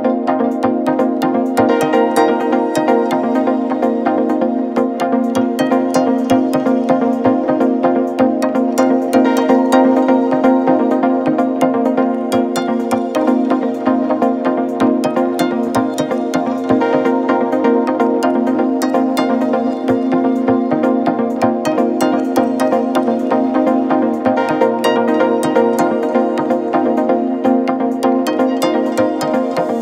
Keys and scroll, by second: 0.7 F1, 5.2 Delete, 5.9 Delete, 11.1 Delete, 16.5 4, 17.2 2, 17.8 f, 18.8 ], 20.3 4, 20.8 ,, 25.1 F1, 25.6 F2, 28.1 0, 28.3 Return, 28.5 F1.